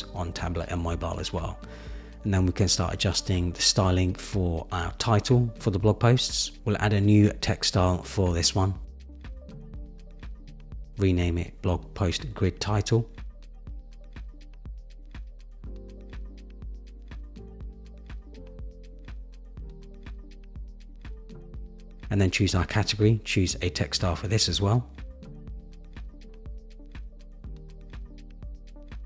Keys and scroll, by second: 15.7 Return, 17.4 Down, 20.4 Down, 20.6 Up, 20.7 Down, 21.0 Up.